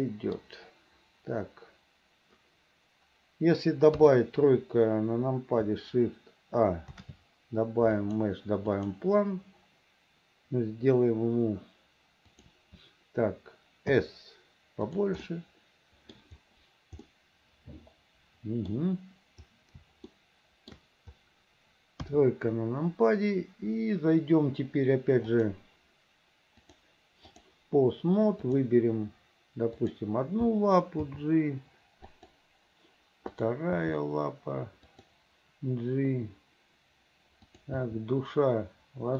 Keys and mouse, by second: 4.1 KP_3, 7.0 shift+a, 12.4 click, 14.1 s, 15.4-16.4 drag, 17.2-18.9 drag, 20.3 shift+middle click, 22.1 KP_3, 25.4 click, 26.9 click, 29.9 click, 31.2 g, 33.5 click, 33.9 g, 37.6 click, 37.9 g.